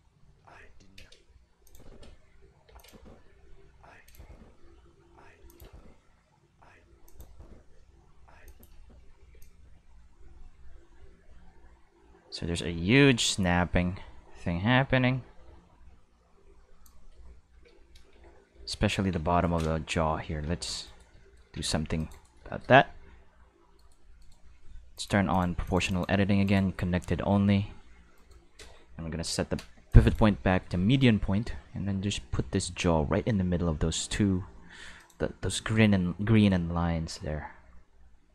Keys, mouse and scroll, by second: 0.0-4.1 typing, 1.6 click, 2.7 click, 4.0 click, 5.3 space, 5.4 click, 5.6 space, 6.8 space, 7.0 click, 7.2 space, 8.4 space, 8.4 click, 8.7 space, 9.3 space, 9.4-16.8 drag, 17.5 Tab, 18.1 q, 18.7 shift+click, 19.0 Tab, 19.4 right click, 20.2 g, 20.8 right click, 21.3 middle click, 21.5 c, 21.9 click, 22.1 right click, 22.7 g, 23.7 right click, 24.2 right click, 24.9 click, 25.3 click, 25.6 click, 25.9 click, 26.4 click, 27.1 g, 28.1 right click, 29.2 Right, 29.9 click, 30.7 g, 35.0 click, 36.3 right click, 36.7 g.